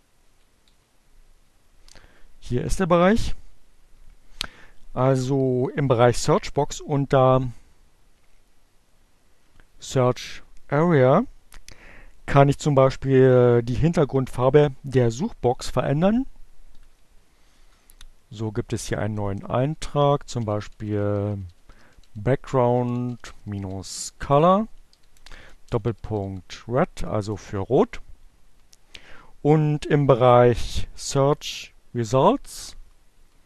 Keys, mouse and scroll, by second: 5.1 Down, 7.7 Right, 15.3 Right, 16.6 Down, 16.8 Return, 17.6 Up, 17.8-25.3 typing, 30.7 Page_Down.